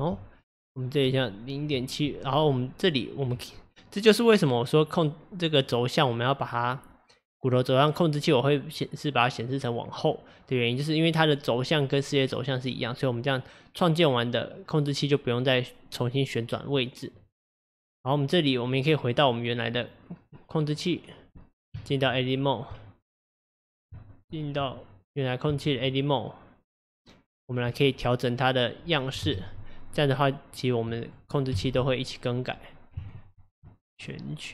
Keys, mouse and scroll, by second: 19.3 click, 19.8 click, 20.8 click, 21.8 Tab, 24.0 Tab, 25.0 click, 25.5 Tab, 29.3 KP_Divide, 30.6 click, 31.0 middle click, 31.6 KP_7, 33.1 ctrl+click, 34.0 click.